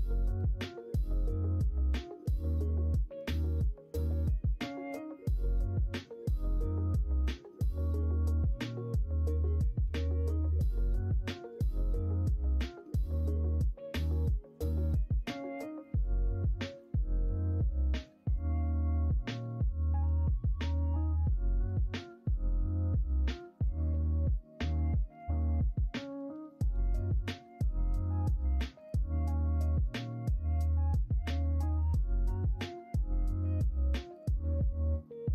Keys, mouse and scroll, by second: 2.3 KP_1, 2.7 KP_3, 3.7 KP_1, 4.6 s, 10.3 Tab, 13.0 middle click, 16.6 click, 17.7 Tab, 18.2 click, 18.4 Tab, 18.8 click, 19.8-21.5 drag, 24.6 middle click, 25.4 middle click, 26.6 click, 27.8 middle click, 28.8 click, 30.7 click, 33.4 click, 35.0 middle click.